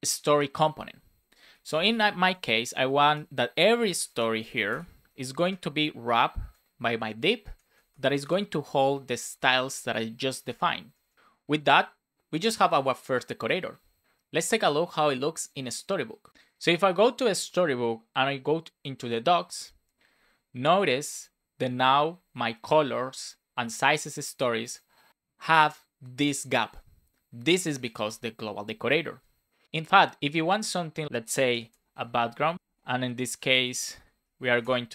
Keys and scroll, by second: 1.1 shift+(, 2.1 shift+', 3.1 Return, 3.8 shift+f, 4.3 shift+s, 5.3 space, 6.1 BackSpace, 7.0 Up, 7.4 Left, 7.7 space, 8.8 shift+[, 10.4 super+s, 10.8 Down, 31.6 Return, 32.5 BackSpace, 34.4 shift+;, 34.5 space, 34.8 shift+1.